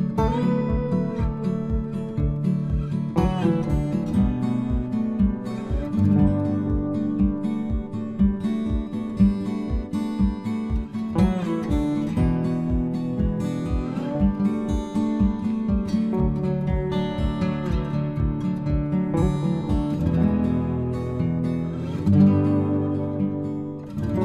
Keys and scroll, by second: 1.8 Return.